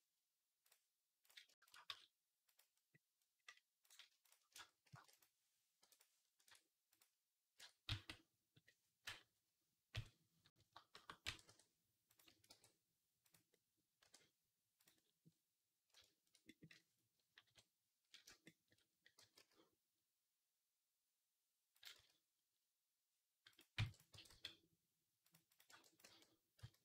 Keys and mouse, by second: 0.5 click, 1.5 shift+click, 1.8 s, 3.7 click, 3.7 middle click, 3.7-5.0 shift+right drag, 4.7 shift+d, 5.0-6.8 middle drag, 5.6 p, 6.3 Tab, 6.8 click, 6.8 middle click, 7.4 Tab, 7.7 a, 9.8 KP_3, 10.8 shift+middle click, 11.1 e, 12.1 a, 12.3 g, 12.8-16.1 middle drag, 13.9 e, 17.3-18.4 middle drag, 17.3 KP_3, 19.0 g, 21.8 z, 23.6 b, 24.0 g, 25.5 b, 25.9 g.